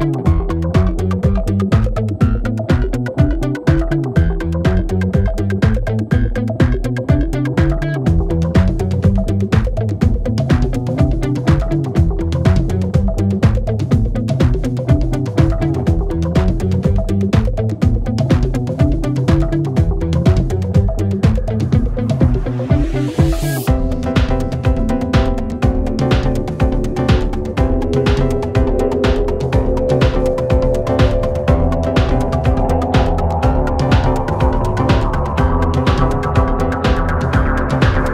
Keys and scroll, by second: 6.4 ctrl+z, 7.1 ctrl+d, 7.4 Escape, 12.9 4, 20.7 ], 23.9 4, 25.5 3, 29.9 4, 32.2 3, 32.7 ], 34.1 4, 36.4 3.